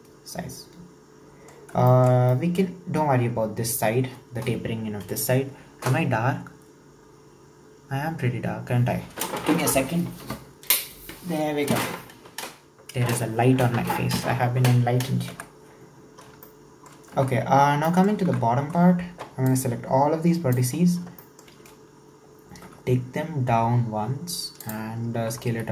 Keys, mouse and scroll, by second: 1.6 scroll up 2, 1.9-2.6 shift+middle drag, 2.6-5.7 scroll up 2, 15.4 KP_1, 16.0-16.5 scroll up 2, 16.5-17.2 shift+middle drag, 17.2 Tab, 17.4-17.9 scroll up 1, 17.9 shift+middle click, 18.4 alt+z, 19.5 click, 20.9-21.2 scroll up 2, 21.2-22.7 shift+middle drag, 22.7 e.